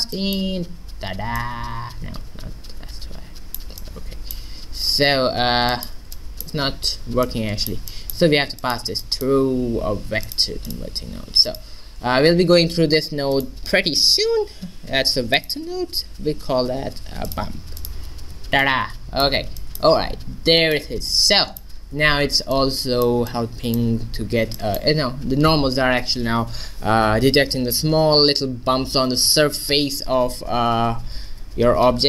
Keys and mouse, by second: 5.7 click, 9.9 g, 10.8-12.5 drag, 11.1 g, 12.1 shift+a, 17.9-19.6 drag, 19.6 middle click.